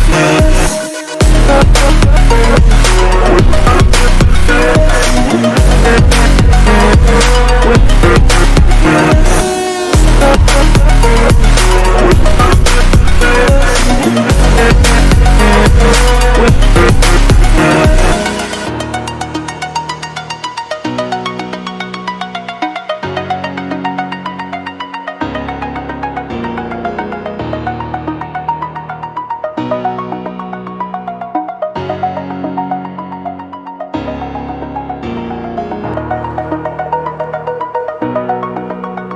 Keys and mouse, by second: 0.4 click, 3.8 click, 4.9 ctrl+g, 8.7 right click, 9.4 click, 11.0 click, 15.9 click, 17.5 click, 18.4 ctrl+t, 19.1 click, 19.8 click, 20.3 click, 24.7 click, 28.7 right click, 29.6 click, 31.8 click, 32.7 ctrl+t, 33.2 shift+click, 35.7 click, 36.3 click, 37.9 click.